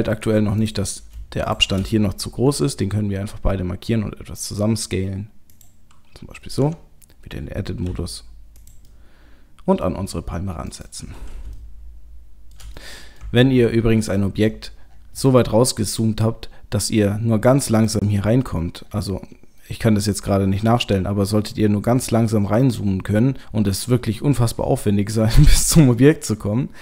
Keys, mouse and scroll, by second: 0.6 click, 1.4 shift+click, 2.4 s, 6.6 Tab, 7.9 g, 8.9 middle click, 9.9 scroll up 1, 10.0 g, 11.6 shift+middle click, 12.8 middle click, 13.5 ctrl+middle click, 14.8 scroll down 5, 15.8-16.5 scroll down 4, 17.1-17.8 scroll up 1, 17.8 click, 18.2-18.8 scroll up 2, 18.8-20.2 scroll down 1, 20.2-20.8 scroll down 2, 22.0-25.6 scroll up 7.